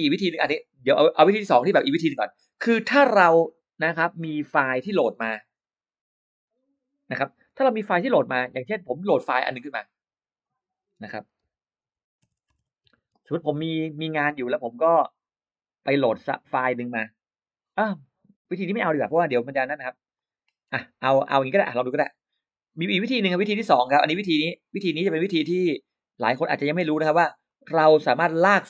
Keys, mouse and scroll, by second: 9.5 click, 10.3 click, 11.3-13.9 typing, 18.6 click, 20.0 click, 23.2 click, 24.0 click, 24.8-26.4 drag, 27.3-28.6 drag.